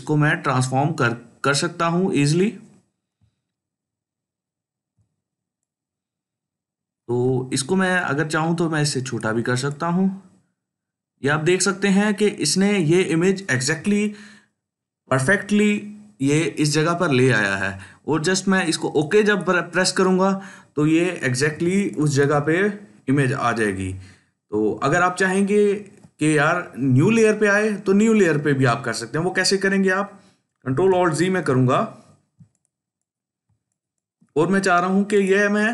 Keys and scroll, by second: 31.0 ctrl+alt+z, 32.2 ctrl+space, 32.7 ctrl+space.